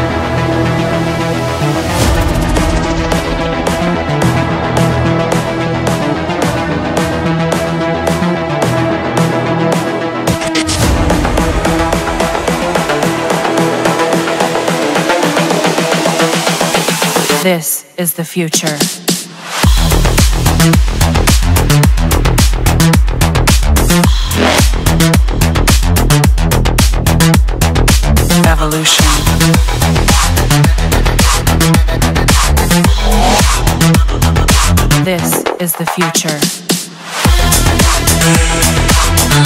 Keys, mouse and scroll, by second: 0.7-1.8 drag, 3.0 click, 4.9-6.3 right drag, 6.3-7.1 middle drag, 7.1-8.3 drag, 10.9-12.0 middle drag, 13.4-14.5 drag, 14.9 click, 16.1-17.1 scroll, 18.0-19.1 drag, 19.3-21.4 drag, 22.0-23.0 drag, 24.4 click, 25.2 click, 26.6 click, 28.0 click, 29.1-31.0 drag, 31.3-32.4 drag, 33.7-34.8 drag, 36.5-37.6 drag.